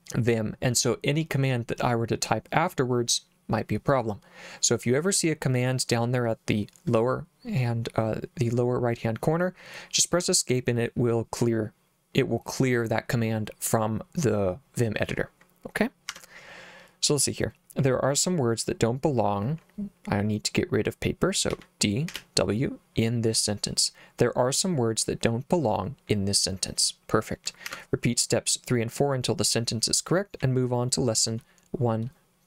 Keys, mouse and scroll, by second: 16.1 Escape, 21.5 d, 22.1 w, 27.7 Escape, 30.4 k.